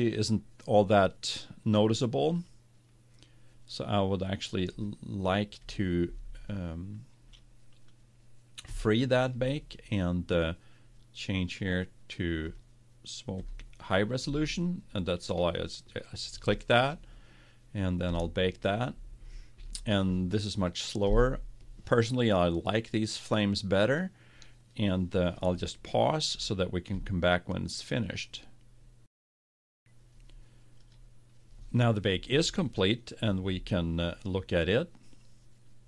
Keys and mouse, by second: 5.1-10.7 drag, 12.5-15.5 drag, 18.2-29.5 drag.